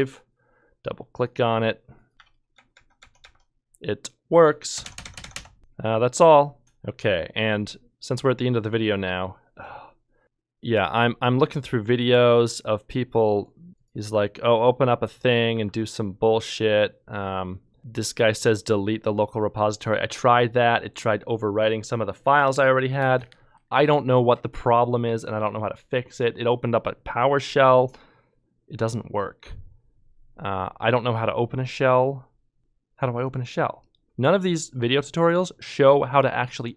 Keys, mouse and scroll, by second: 0.0 ctrl+F2, 10.2 ctrl+Tab, 15.5 ctrl+w, 28.1-28.9 typing, 32.6 Return, 32.6 l, 35.3 ctrl+click.